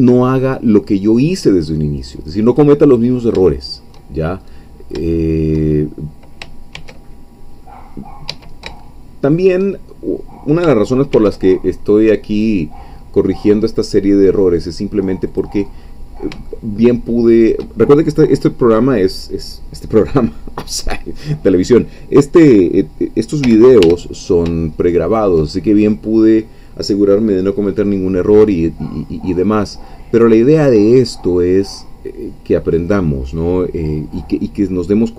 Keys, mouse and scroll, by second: 2.8-4.0 middle drag, 4.2 shift+scroll down 1, 4.5-6.0 middle drag, 6.8 ctrl+r, 8.3 Escape, 8.8-9.9 shift+middle drag, 9.9 shift+scroll down 2, 11.1 ctrl+r, 12.3 click, 15.3 click, 15.8-16.4 scroll up 3, 16.5-17.6 shift+middle drag, 23.4 g, 23.8 y, 25.0 shift+click.